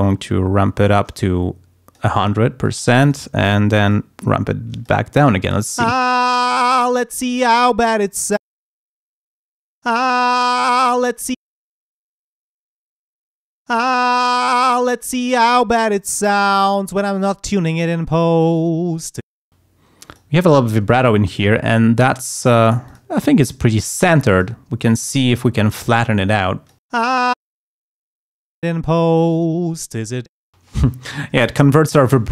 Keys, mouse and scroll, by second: 0.9-2.4 drag, 2.6 click, 3.9-5.0 drag, 5.8 space, 8.5 space, 9.2 click, 9.9 space, 11.4 space, 11.7 click, 12.9 click, 13.7 space, 19.3 space, 20.0 click, 21.3 click, 22.3 click, 23.4-24.6 drag, 25.3 click, 26.4 click, 27.0 space, 28.1 click, 28.7 space, 30.3 space.